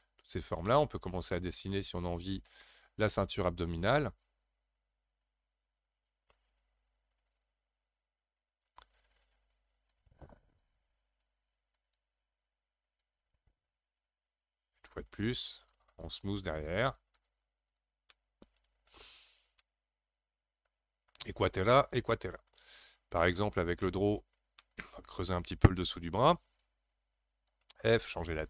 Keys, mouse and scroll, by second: 0.0 shift+click, 0.7-4.4 middle drag, 6.6-9.6 drag, 9.9-18.1 drag, 18.1 middle click, 19.0-19.6 scroll down 1, 19.6-22.6 middle drag, 23.3 click, 23.8 shift+middle click, 24.3-24.6 scroll up 1, 24.6-27.6 middle drag, 27.6 f.